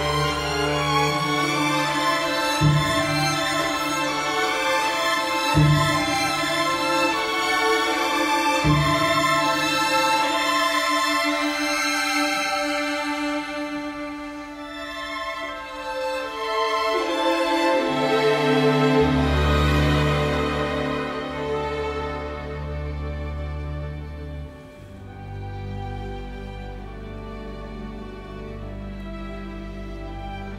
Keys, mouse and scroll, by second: 21.7 Escape, 23.6 space, 24.7 space, 25.8 Escape, 28.2 space, 29.4 Delete, 29.9 space.